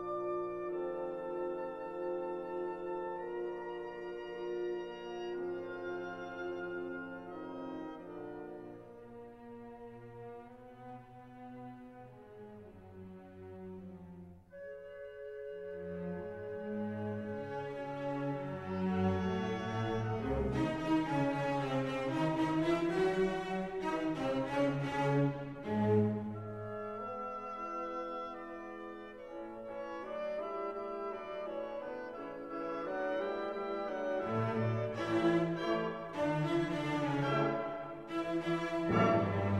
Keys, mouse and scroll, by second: 0.3 scroll up 2, 2.0 click, 5.5 click, 6.4 click, 7.1 1, 8.1 0, 9.0 click, 9.9 1, 10.4 5, 11.1 click, 12.0 3, 12.3 5, 13.1 click, 14.7 click, 16.0 click, 16.6 click, 18.1-19.2 drag, 19.6 click, 20.6 click, 21.1 click, 22.1 click, 22.7-24.2 typing, 24.2 click, 25.4 click, 26.4 click, 28.2 click, 29.7 click, 30.2 click, 32.7-35.8 drag, 36.0 scroll down 1, 36.5 scroll up 1, 37.0 click, 38.1 click, 38.6 click, 39.0-39.5 drag.